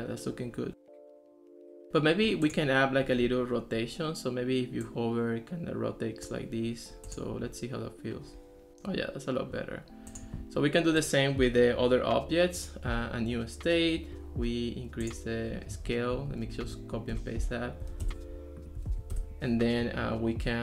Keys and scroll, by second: 16.5 super+v, 17.1 Return, 18.1 Return, 19.0 super+v, 19.1 Return.